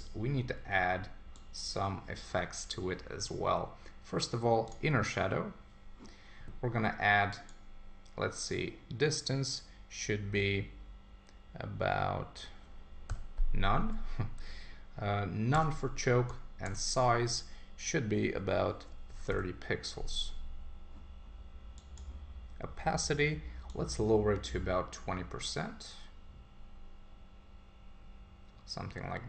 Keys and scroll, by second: 15.5 Tab.